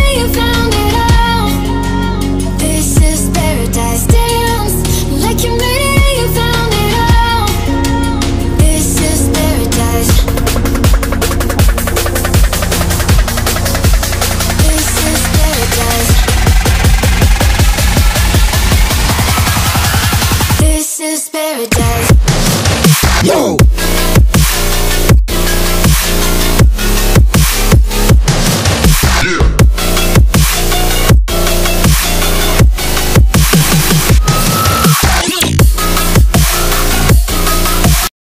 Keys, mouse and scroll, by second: 13.9 click, 19.4 click, 21.6 click, 25.2-28.9 drag, 33.9 click, 35.2 ctrl+s.